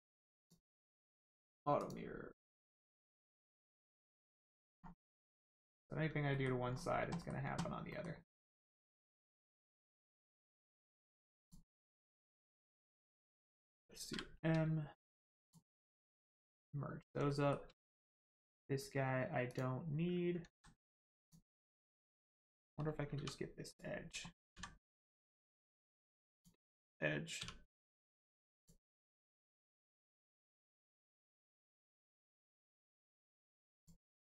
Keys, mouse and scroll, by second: 1.8 click, 3.5 middle click, 4.7 scroll up 1, 5.6 middle click, 5.9 Tab, 6.3 middle click, 6.6 scroll up 1, 7.1 shift+middle click, 7.9 middle click, 7.9 middle click, 8.3-8.6 scroll up 1, 9.3 middle click, 11.1 shift+click, 11.4 shift+click, 15.4 click, 15.9 middle click, 17.2 shift+middle click, 17.9 click, 18.0 click, 18.3 x, 19.4 click, 20.4 ctrl+z, 21.5 scroll up 1, 21.8 shift+middle click, 23.6 click, 24.5 x, 26.3 click, 27.4 1, 28.6 click, 29.3 shift+middle click, 29.8 scroll down 1, 30.3 shift+middle click, 30.7 middle click, 30.8 middle click, 33.2 click, 33.8 shift+click.